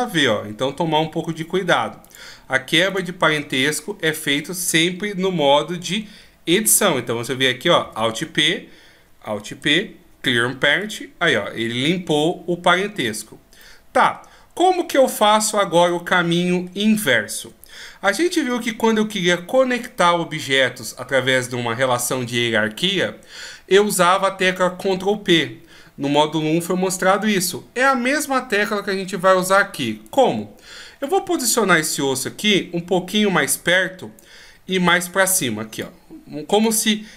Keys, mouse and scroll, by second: 1.9 click, 2.8 click, 7.6 alt+p, 9.4 alt+p, 13.4 middle click, 15.7 middle click, 17.5-18.8 shift+scroll up 1, 29.9 right click, 30.9 middle click, 32.9 click, 34.7 click.